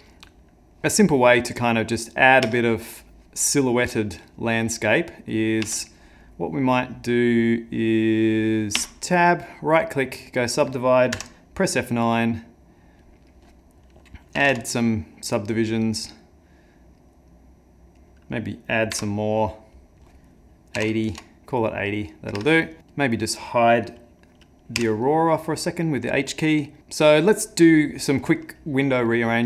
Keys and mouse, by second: 2.5 Tab, 3.9 right click, 5.6 Tab, 8.8 Tab, 9.4 right click, 11.1 F9, 18.9 F9, 22.4 Tab, 22.8 middle click, 22.9 click, 24.8 h.